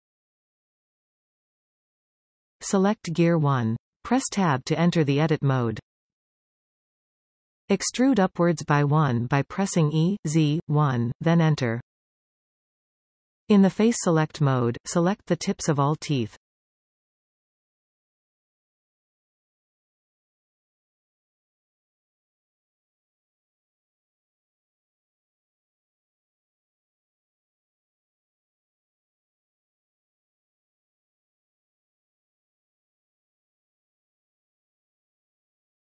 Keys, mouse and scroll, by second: 0.7-3.1 scroll up 2, 4.5 click, 6.9 Tab, 10.3 e, 16.0 click, 16.6-17.8 middle drag, 17.8 click, 18.8 shift+click, 19.1 middle click, 20.0 shift+click, 20.4 shift+click, 20.6 middle click, 21.4 shift+click, 21.7 shift+click, 22.1 shift+click, 22.4 shift+click, 22.8 shift+click, 23.0 middle click, 23.8 shift+click, 24.1 shift+click, 24.3 middle click, 25.0 shift+click, 25.4 shift+click, 25.8 shift+click, 26.5 shift+click, 26.7 middle click, 27.3 scroll up 1, 27.6 shift+middle click, 28.4 shift+click, 28.6 middle click, 29.4 shift+click, 29.7 shift+click, 29.9 middle click, 30.6 shift+click, 31.0 shift+click, 31.5 shift+click, 31.7 middle click, 32.8 shift+click, 33.2 shift+click, 33.8 shift+click, 34.3 shift+click, 34.7 shift+click, 35.3 middle click.